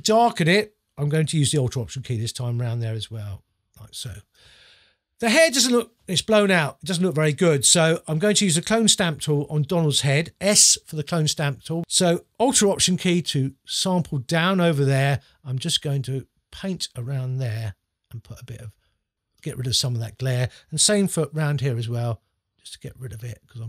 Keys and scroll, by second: 9.8 s.